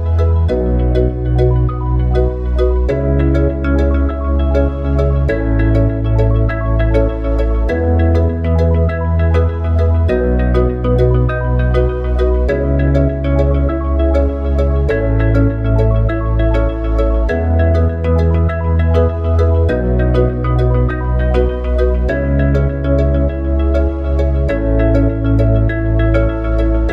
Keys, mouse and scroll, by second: 0.6 s, 3.1 s, 15.6 click, 16.8-19.6 drag, 20.9 click, 24.4-26.9 drag.